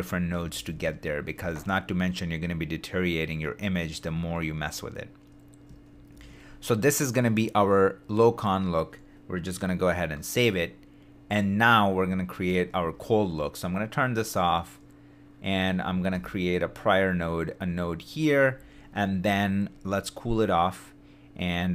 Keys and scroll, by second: 5.9 shift+d, 9.9 y, 13.8 super+d, 16.1 shift+s.